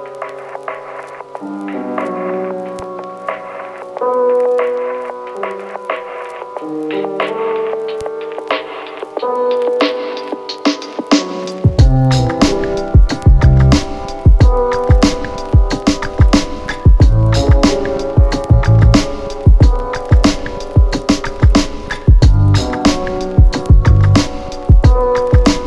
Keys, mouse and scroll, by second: 0.1-0.6 click, 7.5 click, 9.0 click, 11.2 click, 15.4-16.3 click, 18.3 click, 23.4-24.6 click.